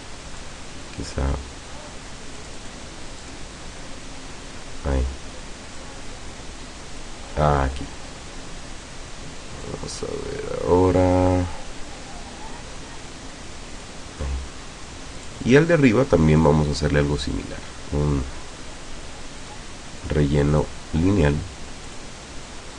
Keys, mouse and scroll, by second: 2.4 click, 3.2 click, 5.8-7.2 drag, 9.7-14.0 drag, 15.2 click, 16.4 click, 19.4 click, 20.0 click, 20.5 click, 21.9 click.